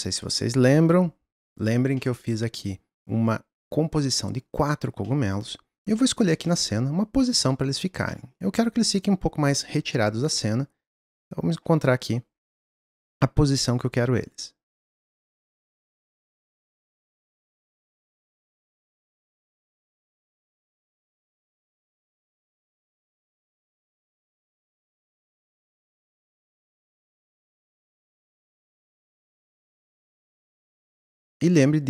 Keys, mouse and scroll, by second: 0.7 ctrl+click, 2.0-3.3 middle drag, 3.3 click, 5.0-5.5 middle drag, 5.5-5.9 scroll down 2, 5.9-11.0 shift+middle drag, 11.0 click, 12.5 click, 15.4 s, 15.8 middle click, 16.0 click, 16.3 middle click, 16.4 scroll up 2, 16.6 g, 17.6 s, 18.1 g, 19.1 s, 20.9 click, 21.5 click, 22.9 click, 24.2 r, 26.3 click, 26.4 scroll down 2, 26.6 middle click, 26.8 scroll up 1, 27.1 click, 27.6 click, 29.3 click, 29.5-30.2 scroll down 1.